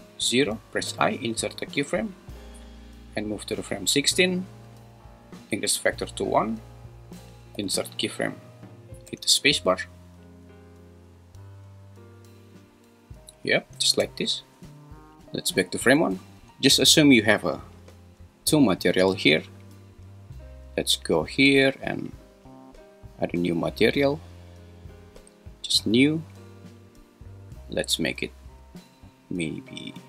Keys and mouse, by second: 0.9 i, 3.1 click, 4.9-6.3 drag, 7.6 i, 9.1 space, 13.9 space, 15.7 shift+Left, 25.9-28.6 drag.